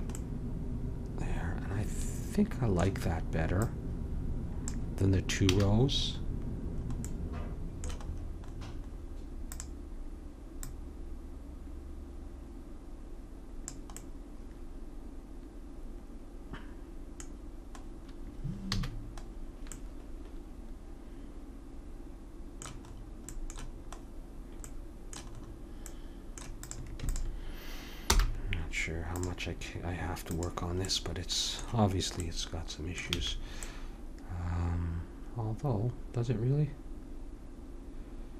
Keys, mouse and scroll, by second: 3.6-5.5 drag, 5.5 a, 9.5-12.5 drag, 14.1 middle click, 18.7 a, 23.3-25.1 middle drag, 26.6-29.1 drag, 28.1 m, 30.3-32.1 drag, 32.1 middle click, 33.2 a.